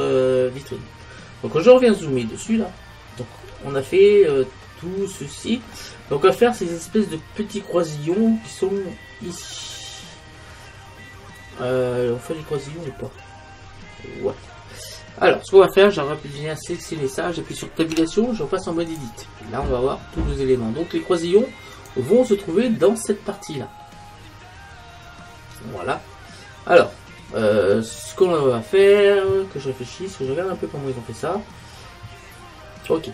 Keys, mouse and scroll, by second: 0.9-1.4 scroll up 1, 1.4-6.4 middle drag, 6.4-7.2 scroll up 1, 7.2-9.4 middle drag, 11.8 middle click, 16.7-19.0 right drag, 18.0 Tab, 21.8-22.8 right drag, 22.8 middle click, 23.4 right click, 23.6-30.0 middle drag, 32.9-33.1 middle drag.